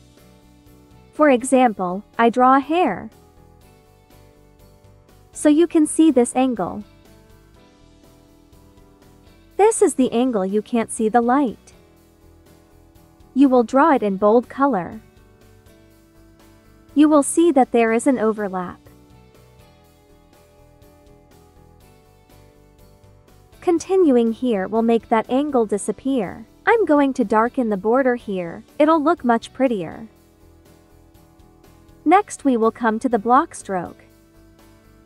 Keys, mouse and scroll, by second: 3.2 ctrl+z, 3.3 ctrl+click, 4.0 click, 4.4 ctrl+z, 4.7 click, 5.7 ctrl+z, 5.8 ctrl+click, 6.5 ctrl+z, 6.6 ctrl+click, 7.9 ctrl+z, 8.1 ctrl+click, 10.9 ctrl+z, 11.4 click, 22.5 click, 24.3 ctrl+z, 24.3 ctrl+click, 27.1 ctrl+z, 27.4 ctrl+click, 27.8 ctrl+z, 27.9 ctrl+click, 30.7 space, 30.9 click, 31.3 space, 32.3-33.7 drag, 34.1-35.0 drag.